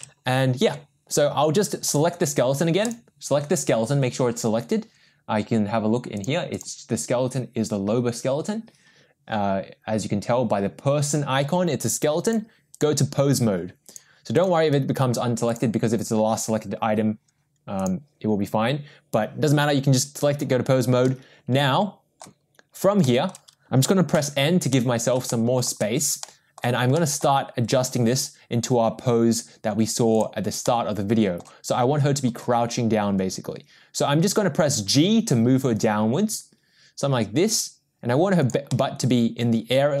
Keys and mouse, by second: 6.5 click, 12.8 click, 13.9 click, 14.5-15.7 drag, 17.8 click, 21.1-22.2 middle drag, 23.0 shift+middle drag, 24.1 n, 24.7-25.1 middle drag, 25.3-25.7 shift+middle drag, 26.2-26.6 middle drag, 27.0 middle drag, 30.3 click, 30.7-31.4 middle drag, 32.4 g, 38.7-40.0 middle drag.